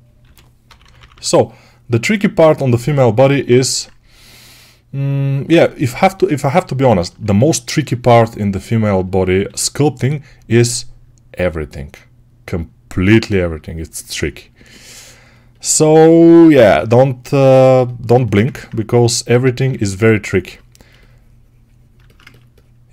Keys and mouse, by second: 0.1 g, 0.5 ], 0.7 ], 7.2 2, 8.8-12.4 alt+right drag, 9.3 g, 12.4-14.0 drag, 14.0-16.3 ctrl+alt+right drag, 16.6 2, 18.5-22.9 alt+right drag.